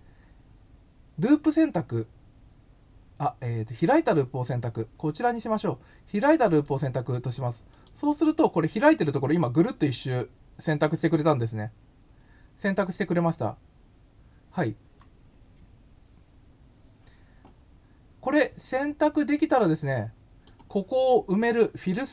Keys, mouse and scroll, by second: 7.7 click, 19.6-20.4 drag.